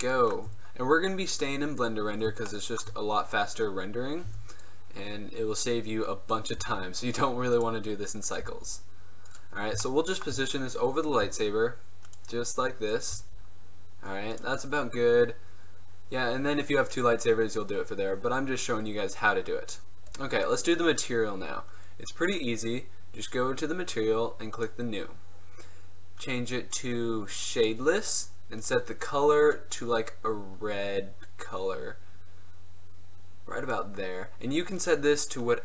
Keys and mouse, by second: 1.6 click, 2.0 middle click, 2.6 middle click, 4.4 Tab, 4.6-5.0 right drag, 5.0 middle click, 5.1-5.7 drag, 6.7 g, 8.5 g, 9.7 middle click, 9.8 drag, 9.9 middle drag, 11.2 middle click, 11.3 g, 13.2 g, 14.2 click, 14.8 middle click, 14.9 click, 16.7 middle click, 20.6-22.4 right drag, 22.4-26.4 drag, 26.4-27.7 middle drag, 27.7-34.2 drag, 34.2 middle click, 34.9-35.6 drag.